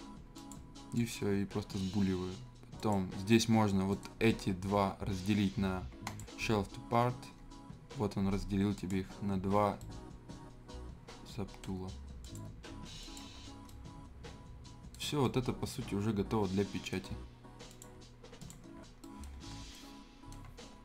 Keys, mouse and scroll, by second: 0.3 click, 3.9 right click, 6.0 click, 8.7 click, 9.8-12.2 right drag, 12.2 click, 12.2 click, 13.4 scroll up 1, 13.6-15.0 right drag, 15.0 scroll up 1, 15.2-17.7 right drag, 18.1 click, 18.8-19.5 scroll down 2, 19.0 right click, 19.5 scroll up 1, 19.7 right click, 20.5 scroll down 1, 20.6 scroll up 1.